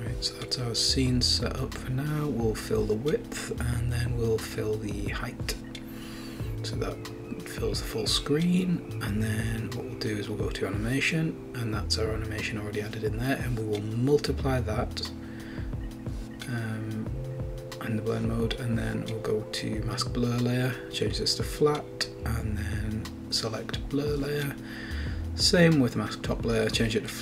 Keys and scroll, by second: 0.0-1.5 typing, 3.0 typing.